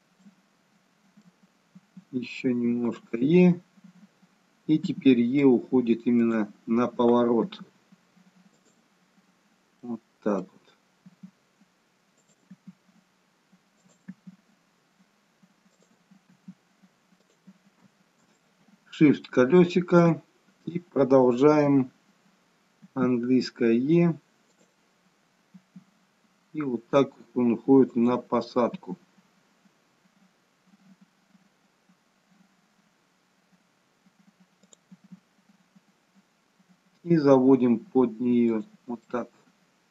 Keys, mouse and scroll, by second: 0.1 middle click, 0.1-1.2 scroll down 1, 1.7 e, 7.3 e, 9.4-9.9 scroll down 2, 9.9 middle click, 11.0 e, 12.7 e, 16.4 e, 18.3 shift+middle click, 25.6 e, 39.1 middle click.